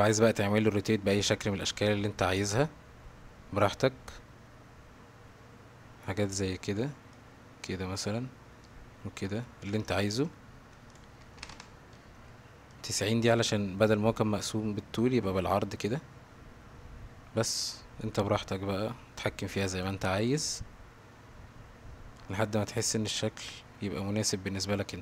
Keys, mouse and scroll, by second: 1.2-6.8 drag, 7.1 click, 8.6-9.7 drag, 9.9 ctrl+z, 10.1 ctrl+z, 10.2 ctrl+z, 10.9 click, 12.7 click, 17.5-19.8 drag, 20.3-22.1 drag, 23.0-25.0 drag.